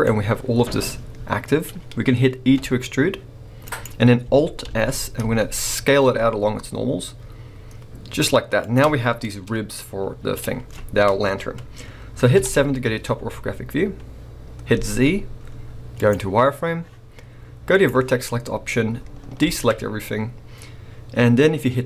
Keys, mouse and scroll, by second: 2.5 e, 3.8 right click, 4.6 alt+s, 8.7 shift+click, 9.0 scroll down 1, 9.2-12.4 middle drag, 10.4-12.1 scroll up 2, 12.1 scroll up 1, 12.4 KP_7, 13.1-14.8 scroll up 2, 14.8 z, 17.7 click, 19.4 alt+a.